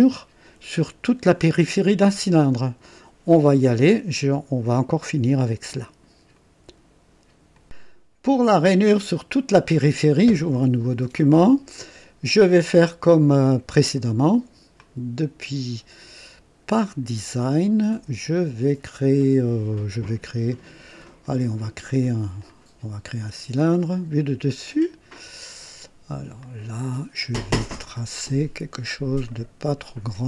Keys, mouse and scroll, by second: 6.3 right click, 7.5 click, 8.9 click, 16.8 click, 21.2 click, 22.4 click, 23.8 click, 24.6 click, 26.3 click, 29.2 click.